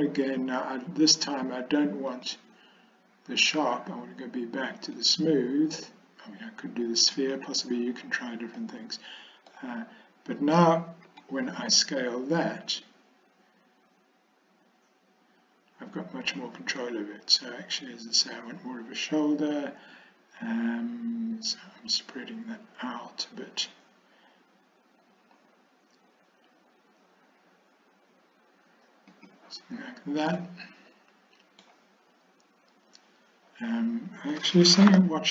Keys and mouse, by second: 2.2-8.0 drag, 8.7 middle click, 11.2 s, 30.4-31.7 middle drag.